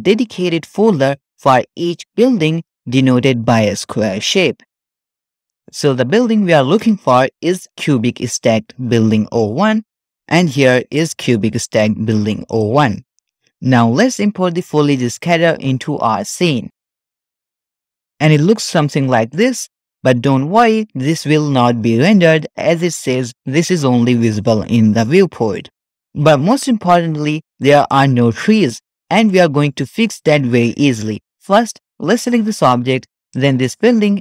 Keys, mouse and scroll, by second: 1.2 click, 2.1 click, 2.9 click, 12.4 click, 14.5 click, 17.4 KP_Decimal, 18.3-19.5 middle drag, 19.5-19.9 scroll up 1, 19.9 click, 20.3-21.5 scroll up 1, 22.3-22.9 middle drag, 25.8 scroll up 1, 27.4-28.0 scroll down 1, 28.0 middle click, 28.0 scroll down 2, 29.0 scroll down 1, 29.2-30.3 middle drag, 31.3-32.2 middle drag, 32.2 click, 33.4-33.8 shift+drag.